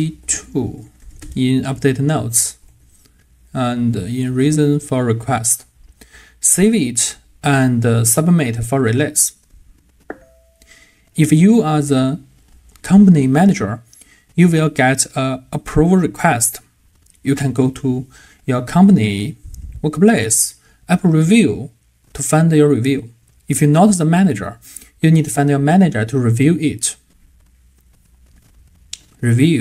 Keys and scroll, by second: 2.7 super+c, 3.9 super+v.